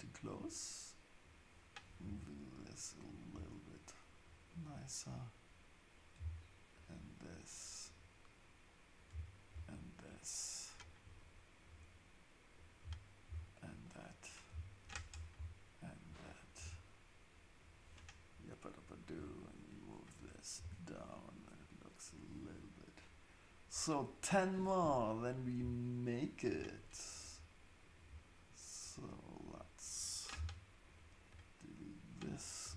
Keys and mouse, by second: 2.0 g, 4.2-6.8 drag, 6.2 x, 7.9-9.6 drag, 9.1 x, 11.3-13.4 drag, 12.8 x, 14.5 x, 16.0 click, 16.6 g, 19.1-22.3 drag, 20.6 g, 25.4 click, 27.8 shift+click, 28.8 shift+click, 30.0 shift+click, 30.3 x, 32.2 click, 32.6 g.